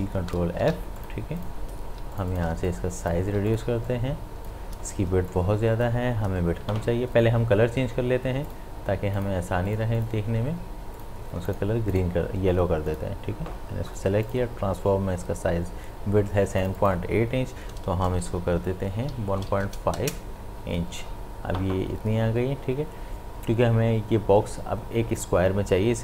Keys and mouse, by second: 0.6 v, 1.0 click, 2.0 space, 2.1 ctrl+alt+click, 2.5 ctrl+space, 2.7 click, 3.0 space, 3.5 ctrl+click, 3.6 ctrl+space, 3.9 click, 4.2 space, 4.6 space, 5.3 click, 5.7 space, 8.5 click, 16.6 click.